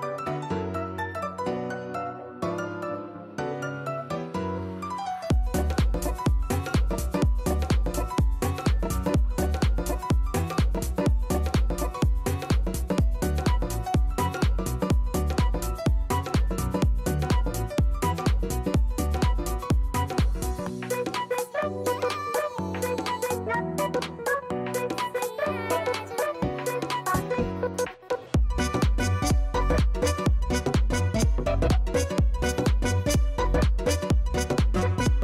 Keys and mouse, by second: 1.8 KP_3, 2.1 Return, 5.9 click, 8.4 right click, 12.4 click, 15.4 click, 16.4 click, 20.6 click, 21.6 click, 23.9 click, 24.2 alt+right click, 24.4 alt+middle click, 24.7 alt+click, 25.4 alt+right click, 27.2 click, 27.2 right click, 27.9 click, 29.4 click, 32.3 alt+click, 32.8 alt+middle click, 33.7 click.